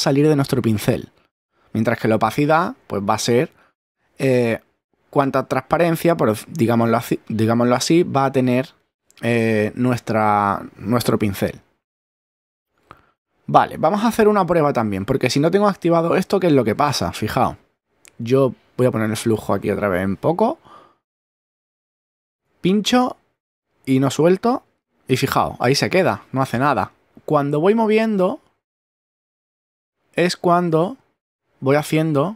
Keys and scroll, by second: 21.9 <.